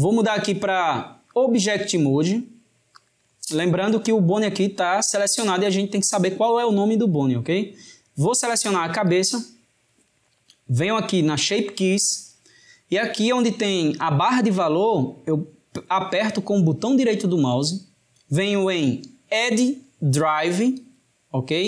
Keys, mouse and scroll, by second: 1.3-4.3 drag, 8.9 drag, 10.8-13.8 middle drag, 16.9-19.9 right drag.